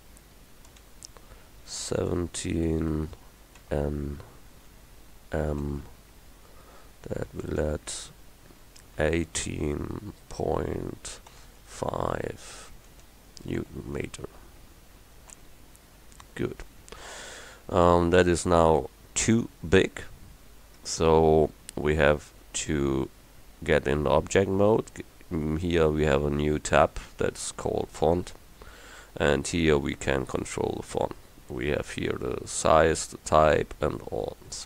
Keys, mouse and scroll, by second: 0.8 space, 2.0 1, 2.2 7, 3.7 shift+n, 5.6 shift+m, 7.5 space, 8.8 1, 9.1 8, 11.4 ., 11.7 5, 13.0 space, 13.7 shift+n, 15.4 m, 20.9 Tab, 28.1-31.5 drag.